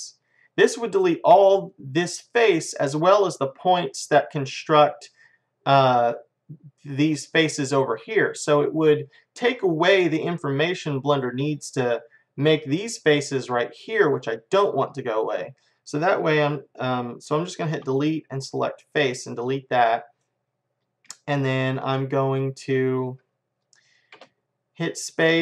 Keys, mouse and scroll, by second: 9.2-11.6 middle drag, 15.1-17.8 middle drag, 17.8 Delete, 19.5 middle click, 24.2 space.